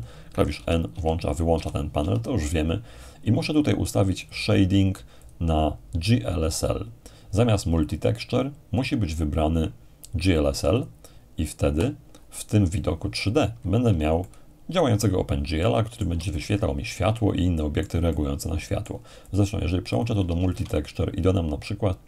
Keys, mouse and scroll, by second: 0.6 ctrl+n, 0.9 ctrl+n, 1.5 n, 4.2-6.2 drag, 10.8-11.8 drag, 14.2-21.0 shift+middle drag, 19.3 click, 20.4 shift+a.